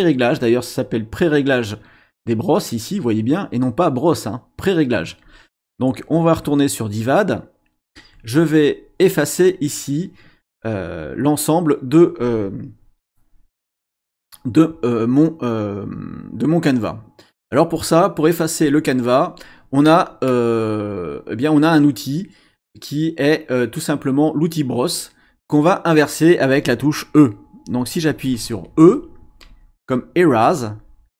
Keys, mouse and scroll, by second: 1.2-2.9 drag, 5.2 click, 6.8 click, 29.4 e.